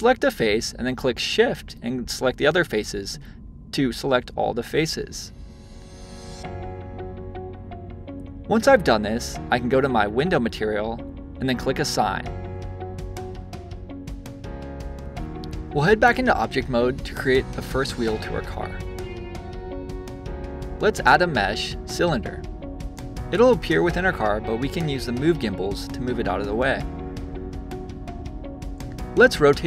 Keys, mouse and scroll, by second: 0.2 shift+click, 0.7-1.9 middle drag, 1.9 shift+click, 2.4-3.6 middle drag, 3.6 shift+click, 4.2 shift+click, 4.6-7.7 middle drag, 7.7 shift+click, 9.9 click, 10.9 click, 12.2-15.7 shift+middle drag, 16.2-18.1 drag, 18.5 middle click, 19.8-22.7 drag, 22.7-24.4 middle drag, 24.4 click, 27.9 click.